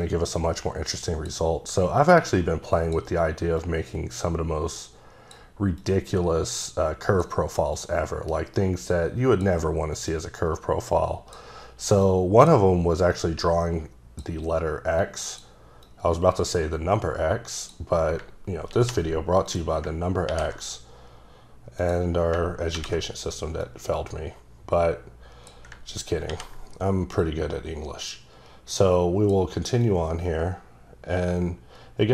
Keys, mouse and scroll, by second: 0.9 click, 2.2 click, 3.6 click, 5.8 click, 7.7 click, 10.1 click, 12.0 click, 13.1 click, 15.0 click, 15.8 click, 18.7 ctrl+c, 19.4 click, 20.3 ctrl+v, 21.8 click, 22.7 ctrl+v, 23.6 click, 26.3 v, 27.2 click, 29.8 click.